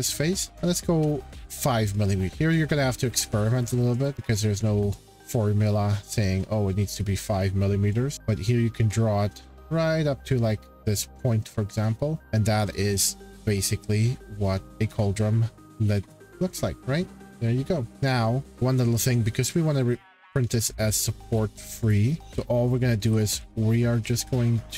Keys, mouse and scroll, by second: 1.2 click, 2.5 click, 2.5 scroll, 3.3 middle click, 4.0 click, 5.0 click, 5.0 scroll, 12.5 click, 13.4 click, 14.6 shift+middle click, 14.8-15.1 scroll, 16.1 click, 17.7-18.6 scroll, 17.9 middle click, 19.4 shift+middle click, 19.9 scroll, 21.0-21.4 shift+scroll, 21.9 click, 22.3 scroll, 22.9 scroll, 23.0-24.5 typing.